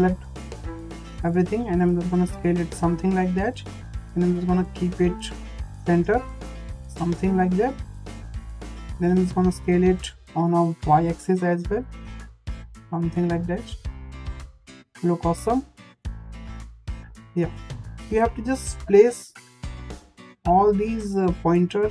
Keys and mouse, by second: 0.8 s, 3.6 click, 3.8 click, 5.6-6.9 drag, 7.4 click, 7.6-9.2 drag, 9.4 s, 15.0 s, 18.0 click, 18.1 click, 18.8 click, 20.1 click, 20.8 click, 21.8 click.